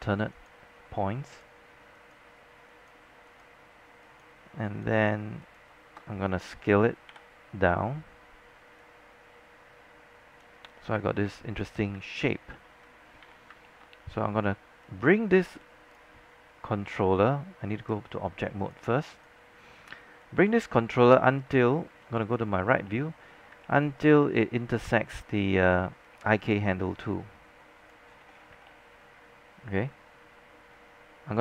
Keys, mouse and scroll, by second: 1.5 shift+click, 2.1 shift+click, 3.4 shift+click, 5.2 shift+click, 5.5 shift+click, 6.7 shift+e, 7.2 shift+r, 8.9-12.0 drag, 11.1 space, 12.2 alt+click, 12.5 alt+middle click, 13.3 alt+w, 13.7 alt+middle click, 14.9 click, 16.3 z, 17.0-18.8 right drag, 18.6-22.8 drag, 21.3 space, 23.0 alt+middle click, 23.3-24.0 scroll up 2, 25.2 alt+middle click, 26.1-28.2 drag, 28.2 scroll down 1, 28.8-29.9 alt+middle drag, 30.4-31.4 scroll up 1.